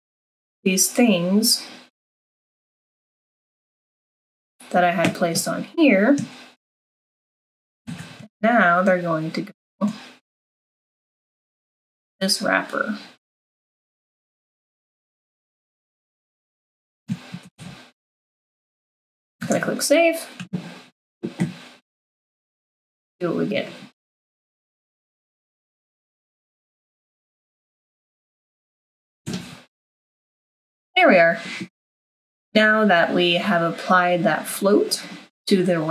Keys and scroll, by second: 7.9 ctrl+x, 17.4 ctrl+v, 19.4 ctrl+s.